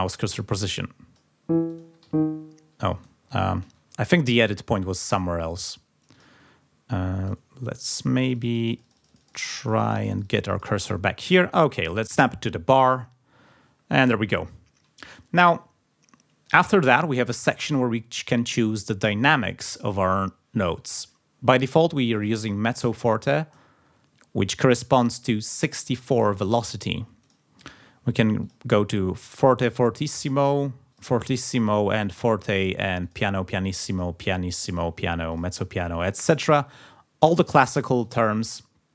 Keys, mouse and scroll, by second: 1.1 click, 1.7 click, 2.2-2.5 ctrl+scroll down 2, 2.8 ctrl+scroll up 2, 3.2 ctrl+scroll down 2, 3.6 ctrl+z, 6.1 click, 8.2-10.8 drag, 12.7 click, 25.8 click, 27.2 click, 28.4 click, 30.9 click, 32.0 click, 33.0 click, 33.9 click, 34.7 click, 35.3 click, 36.1 click.